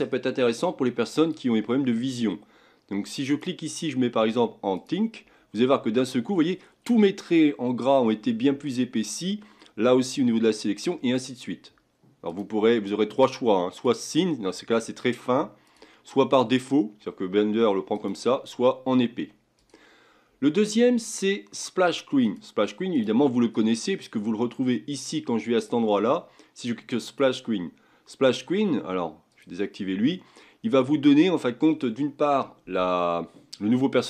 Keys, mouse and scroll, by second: 25.6-28.7 drag.